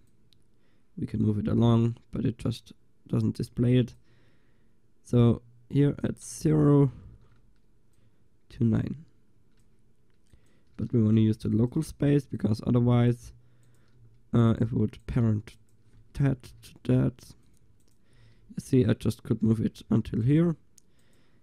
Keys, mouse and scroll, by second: 4.0-7.2 drag, 7.2 alt+g, 8.0-10.4 drag, 10.5-13.7 drag, 14.0 g, 15.1-17.5 drag, 16.6 ctrl+p, 17.9 click, 18.2-19.7 right drag, 18.2 g, 21.1-21.4 right drag.